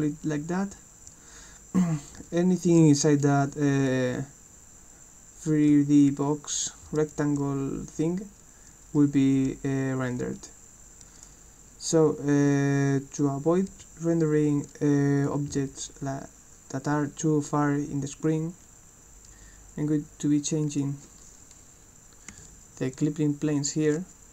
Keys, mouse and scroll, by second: 0.7 w, 2.2 s, 2.8 w, 3.8 a, 5.7 s, 6.1 d, 6.9 s, 9.0 w, 9.5 d, 10.4 a, 12.4-15.2 right drag, 13.4-14.3 typing, 20.7 click.